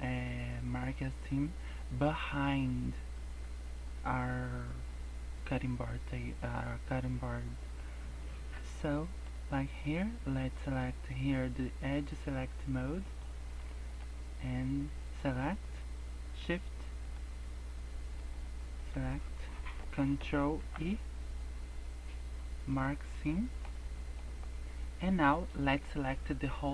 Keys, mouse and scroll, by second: 0.0 scroll up 2, 0.7 scroll down 2, 1.0 scroll up 2, 2.0 scroll down 2, 3.9 scroll up 1, 7.7 middle click, 8.5 scroll up 3, 8.9 shift+middle click, 9.2 scroll up 2, 13.0 click, 13.6 shift+middle click, 15.1 click, 17.0 shift+click, 18.2 shift+click, 20.5 ctrl+e, 23.0-23.4 scroll down 3, 23.4 middle click, 23.7-24.1 scroll down 2, 23.9 middle click, 24.2 scroll up 3.